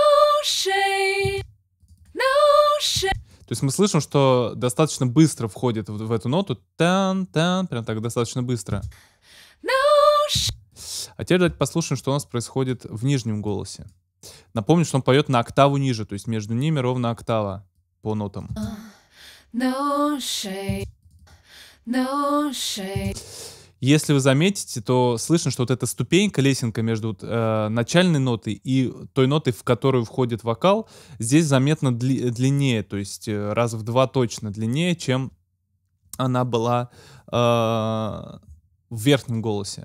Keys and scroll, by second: 2.9 space, 8.8 space, 10.3 space, 18.4 space.